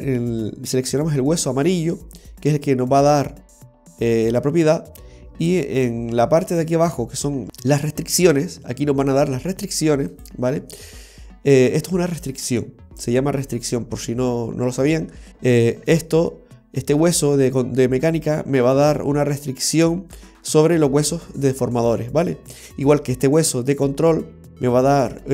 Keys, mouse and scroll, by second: 1.1 right click, 10.2 click, 12.2 l, 18.1 right click, 23.4 right click.